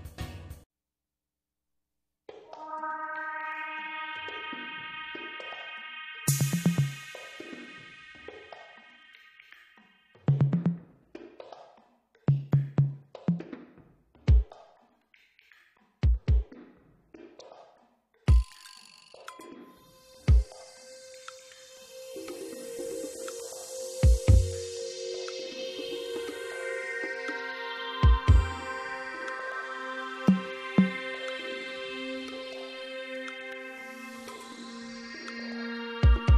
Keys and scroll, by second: 0.2 alt+s, 1.1 Escape, 1.9 ctrl+-, 2.5 ctrl+-, 2.9 alt+s, 3.5 Escape, 16.4 alt+s, 17.2 Escape, 33.0 alt+s, 34.3 alt+s.